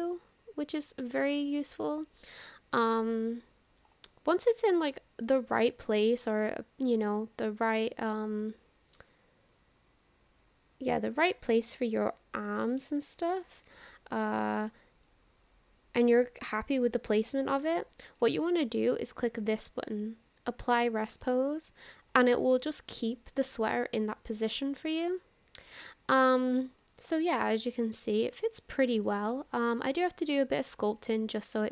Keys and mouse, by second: 3.1 ctrl+z, 5.3-8.0 middle drag, 9.7-14.7 drag, 15.0-18.2 middle drag, 21.2 click, 22.4 click, 22.8-25.8 middle drag, 26.8 middle click, 28.6 click, 29.0-31.7 middle drag.